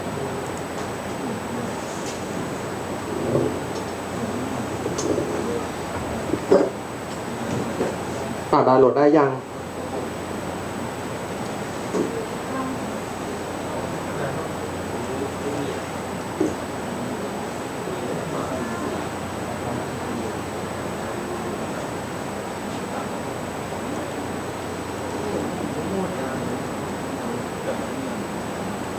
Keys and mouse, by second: 25.5-28.9 middle drag.